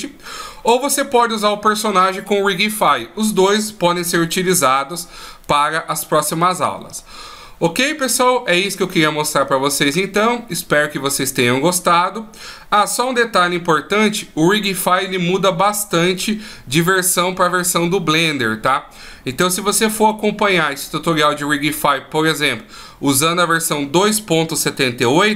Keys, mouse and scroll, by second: 24.9 click.